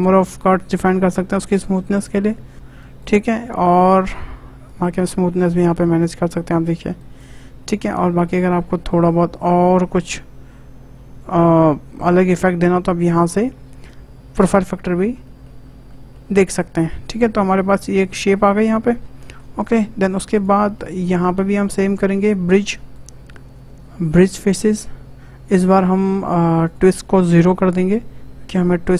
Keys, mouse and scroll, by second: 0.0-2.0 drag, 2.5 click, 4.6-7.2 drag, 7.9-11.0 drag, 14.9-15.2 scroll down 2, 15.2 middle click, 15.6 scroll up 1, 15.9-17.1 shift+middle drag, 17.1 click, 17.4 Tab, 17.6 middle click, 18.4 Tab, 18.8-19.2 scroll up 2, 19.2-20.3 shift+middle drag, 20.3 click, 20.7-21.8 shift+middle drag, 21.8 shift+click, 22.1 shift+middle click, 22.9-26.6 right drag, 26.6-28.9 drag.